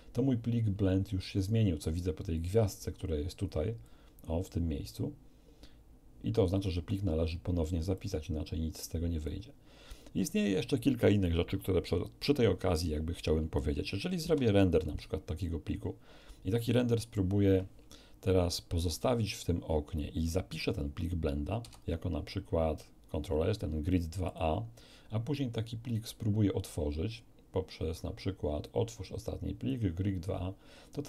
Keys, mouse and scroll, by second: 3.8 click, 7.9-9.4 drag, 14.2 F12, 15.6 scroll down 2, 21.6 ctrl+s, 24.2 click, 25.9 click, 29.7 click.